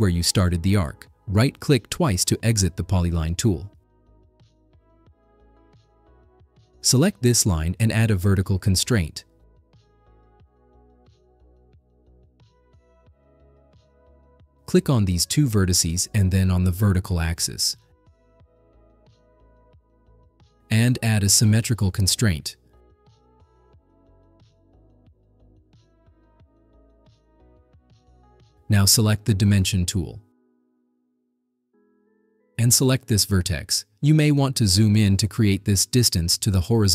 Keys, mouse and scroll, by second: 0.8 click, 1.6 right click, 2.9 right click, 4.6-5.8 right drag, 7.7 click, 11.9 click, 14.5 click, 15.7 click, 16.9 click, 18.7 click, 23.3 click, 26.3-26.9 scroll up 2, 27.1 right drag, 27.6-28.0 scroll up 3, 29.3 click, 33.5 click, 35.0 scroll up 4, 35.0 middle click, 35.9 middle click.